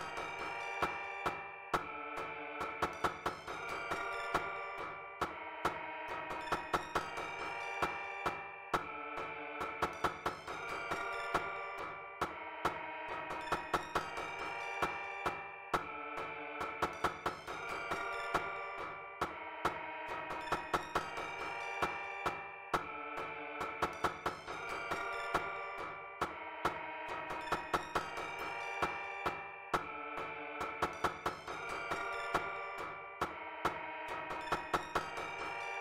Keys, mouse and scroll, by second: 3.7 click, 4.2 click, 5.1 click, 5.6 click, 7.8 click, 13.0 click, 14.7 click, 16.3 click, 17.4 click, 19.1 click, 21.1 click, 21.8 click, 22.3 click, 22.8 click, 23.9-26.4 drag, 27.0 click, 27.9 click, 28.5 click, 30.6 click, 32.7 click, 33.2 click, 34.2 click, 34.9 click.